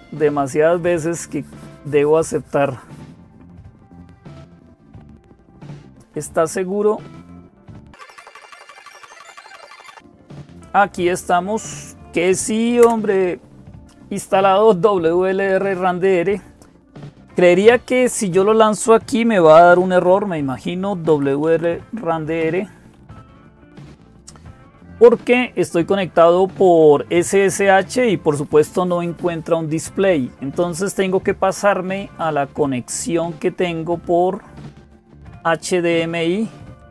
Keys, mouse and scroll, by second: 0.0-36.9 typing, 12.6 Return, 23.2 Return, 36.6 click.